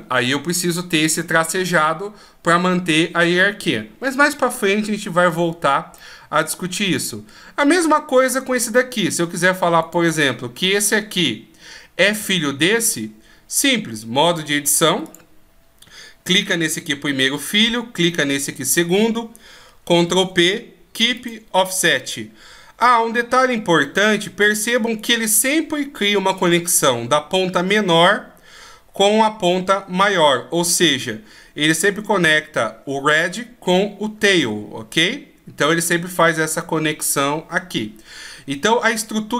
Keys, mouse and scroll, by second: 5.4 middle click, 9.3 right click, 13.7 click, 14.6 click, 18.0 shift+right click, 19.5 ctrl+p, 24.4 right click.